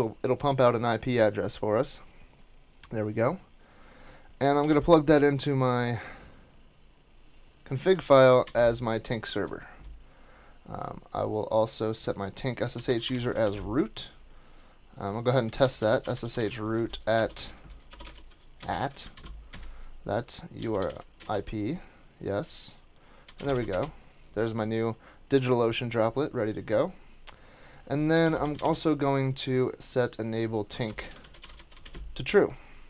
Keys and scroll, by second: 4.6 super+c, 8.4 super+v, 9.2 super+s, 12.5-13.5 typing, 15.2-18.7 typing, 19.1 super+v, 19.5 Return, 20.3-21.3 typing, 23.0-24.0 typing, 28.2-29.2 typing, 30.8 alt+BackSpace, 31.0-32.0 typing.